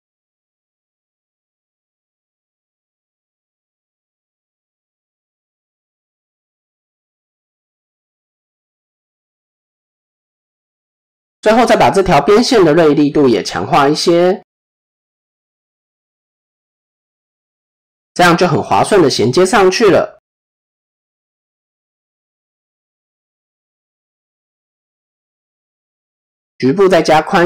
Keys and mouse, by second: 1.4-2.6 drag, 3.0-4.2 middle drag, 4.8 middle click, 5.5 KP_7, 6.3 click, 6.8 shift+middle click, 8.4 click, 8.9-10.1 middle drag, 11.0 click, 12.2 middle click, 13.8-15.1 drag, 15.4-16.9 middle drag, 18.6 middle click, 19.6 KP_7, 20.4 shift+middle click, 20.9 click, 21.4 shift+middle click, 23.3 shift+middle drag, 23.8 click, 25.1 s.